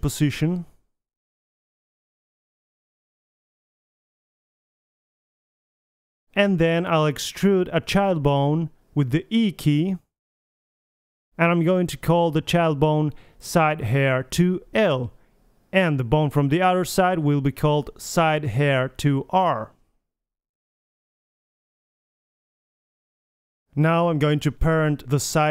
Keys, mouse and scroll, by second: 0.2 Tab, 0.7 click, 1.5 right click, 1.5 middle click, 1.6 Tab, 2.0-5.2 typing, 5.0 click, 5.2 middle click, 5.8 middle click, 6.0 middle click, 6.5 g, 9.8 e, 10.7 click, 10.9-12.2 middle drag, 11.6 g, 12.4 middle click, 13.1 g, 14.8 middle click, 15.0 click, 15.5 right click, 15.8 ctrl+c, 16.4 click, 17.5 Left, 18.6 ctrl+c, 19.9 click, 20.3 middle click, 20.7 click, 22.2 middle click, 24.2 middle click, 24.7 click, 24.7 a.